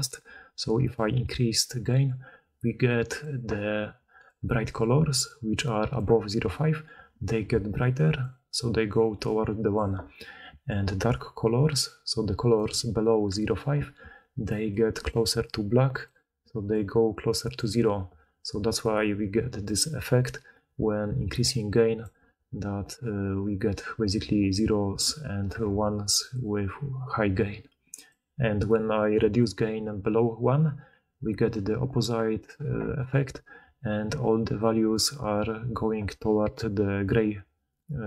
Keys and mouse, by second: 3.9 d, 5.9 d, 6.0 d, 7.4-9.1 d, 9.7 d, 9.8 d, 10.4 d, 12.5 d, 12.6 d, 13.9-35.6 d.